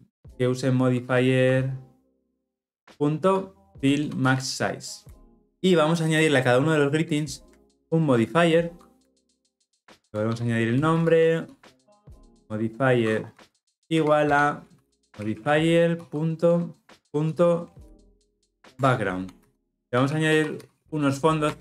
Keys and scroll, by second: 9.1 alt+Return, 14.2 Return, 20.6 Return.